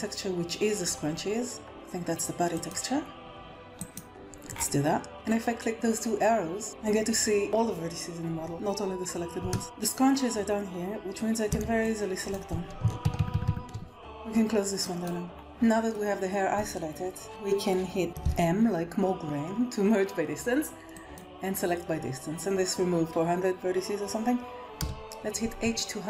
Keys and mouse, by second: 2.6-9.4 right drag, 9.5 shift+middle click, 11.4 b, 13.0 ctrl+KP_Add, 13.1 ctrl+KP_Add, 13.2 ctrl+KP_Add, 13.4 ctrl+KP_Add, 13.6 b, 14.9 click, 15.3 middle click, 18.1 m, 24.8 h, 25.7 middle click.